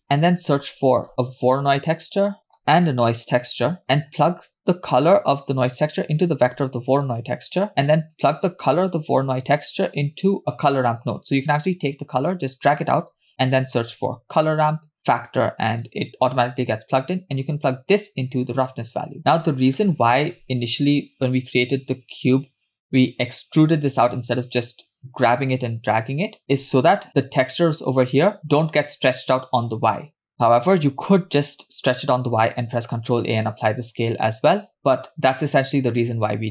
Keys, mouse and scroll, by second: 0.0 middle click, 0.4 shift+a, 5.3 click, 5.5-6.5 drag, 7.0-7.6 scroll up 2, 7.7 shift+a, 11.9-15.8 drag, 17.5 click, 17.8-18.9 drag, 20.0 KP_0, 20.8 Tab, 26.6 Tab, 27.1 KP_0, 32.7 ctrl+a, 35.9-36.5 scroll up 2.